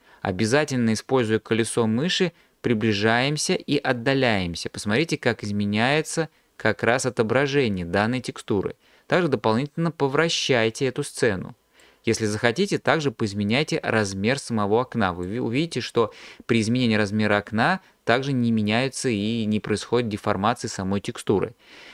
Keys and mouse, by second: 12.3-13.9 drag.